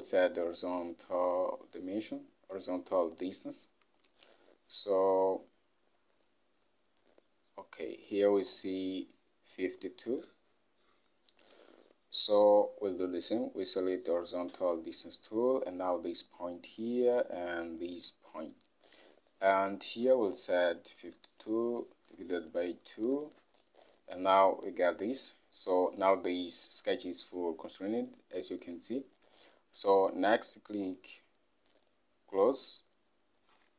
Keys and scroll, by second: 4.2 ctrl+Tab, 11.9 ctrl+Tab, 20.8-22.6 typing, 23.2 Return.